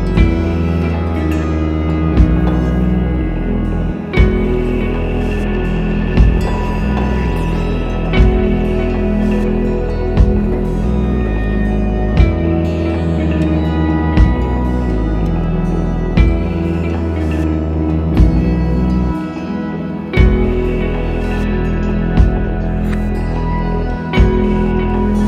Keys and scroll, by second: 22.6 m, 24.1 space.